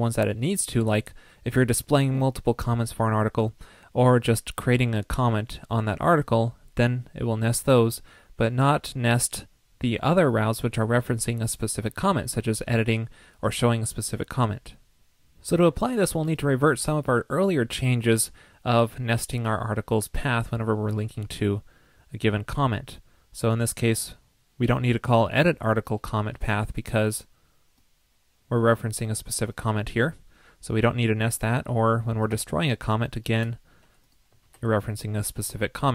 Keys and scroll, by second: 34.4 super+s.